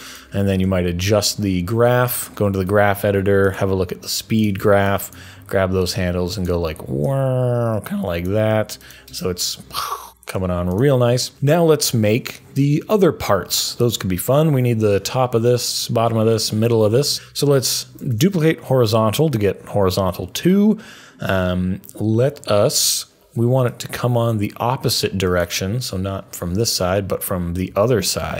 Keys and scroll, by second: 0.5 F3, 10.3 F3, 17.9 super+d.